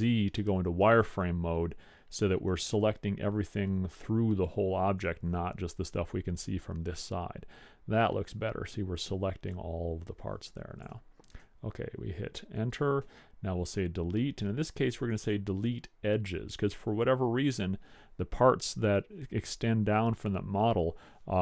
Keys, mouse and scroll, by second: 3.9 c, 13.2 Delete.